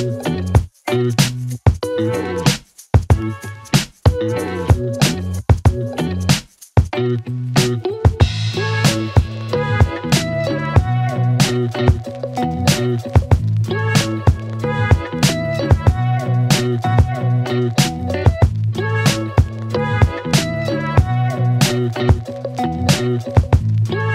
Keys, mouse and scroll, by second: 1.1-2.0 click, 3.8-5.1 click, 5.3 space.